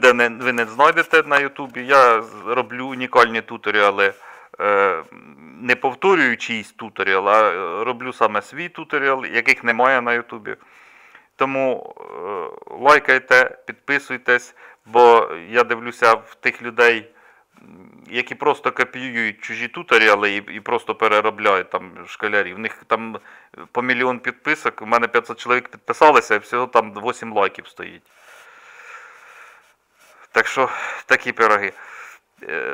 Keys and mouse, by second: 29.6-31.5 middle drag, 31.7-32.7 middle drag.